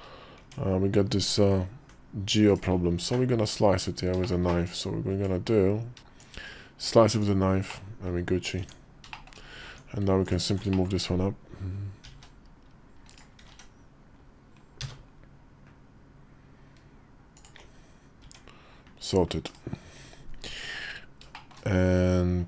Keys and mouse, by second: 0.1 Tab, 1.8 ctrl+r, 2.7 `, 3.5 Tab, 4.0 shift+middle click, 4.4 click, 5.2 KP_5, 6.8 click, 6.8 `, 7.5 middle click, 8.4 Tab, 8.9 shift+middle click, 9.4 Tab, 10.0 alt+click, 10.5 shift+middle click, 11.8 g, 13.1 g, 18.0 Tab, 19.2 /, 20.4 KP_5, 21.1 shift+middle click.